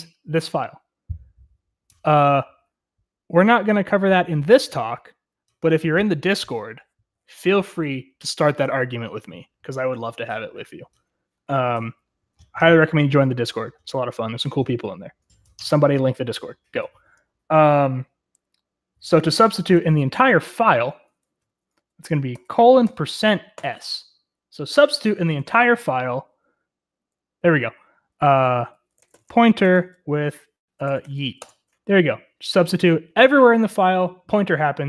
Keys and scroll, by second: 19.6 Escape, 22.3-23.5 typing, 25.5 typing, 28.1-31.4 typing, 31.6 Return.